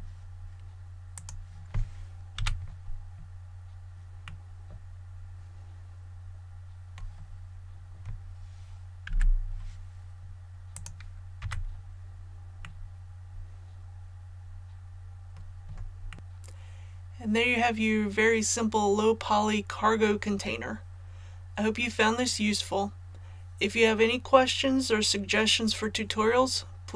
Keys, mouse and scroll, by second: 1.1 click, 2.3 a, 3.1 scroll down 1, 4.2 middle click, 4.7-5.0 scroll up 1, 7.0-8.9 scroll up 1, 10.7 click, 11.3 a, 12.6-16.0 middle drag.